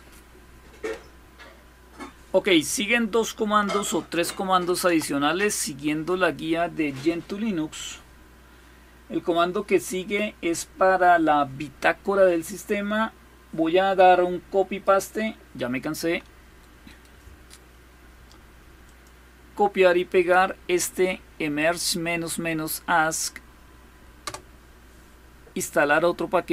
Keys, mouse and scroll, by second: 0.8-1.4 scroll down 1, 3.9 ctrl++, 4.3 ctrl++, 7.9-9.0 scroll up 1, 9.0-9.7 scroll up 1, 11.9-12.5 scroll down 1, 12.5-13.1 scroll down 1, 14.5 click, 16.8 right click, 17.3-18.5 right drag, 18.5 click, 23.9 Return.